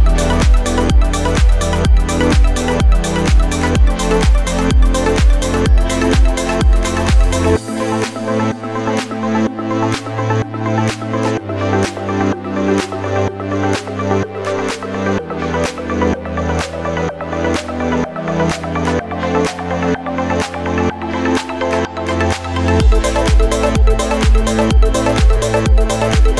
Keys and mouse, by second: 12.9-26.3 ctrl+middle drag, 13.2 ctrl+v, 15.6 KP_1, 15.8 KP_3, 16.6 g, 17.2-26.3 right drag, 18.2-19.4 drag, 18.9 g, 20.6-26.3 drag.